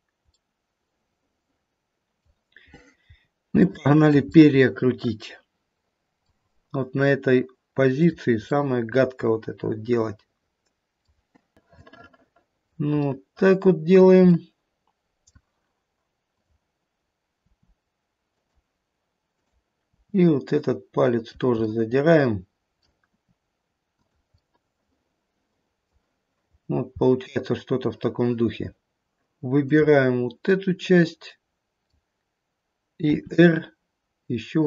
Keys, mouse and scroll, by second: 0.3 middle click, 2.6-3.3 scroll up 1, 3.3 scroll up 1, 3.6 shift+middle click, 4.1-5.4 scroll up 1, 5.4 middle click, 7.9 click, 8.7 middle click, 8.8 middle click, 9.3 middle click, 9.8 middle click, 10.4 middle click, 10.8 middle click, 11.6 click, 11.6 middle click, 11.6 r, 12.2 middle click, 12.4 middle click, 12.9-13.3 scroll up 2, 13.3 middle click, 14.4 middle click, 16.2 click, 17.3 r, 19.3 click, 20.0 r, 21.7 middle click, 22.5 middle click, 23.1 r, 24.3 middle click, 24.9 middle click, 25.6 middle click, 25.7 middle click, 26.5-27.0 scroll down 1, 28.7-29.1 scroll down 2, 29.1 middle click, 29.6 click, 30.5 middle click, 31.4 middle click, 33.1 r.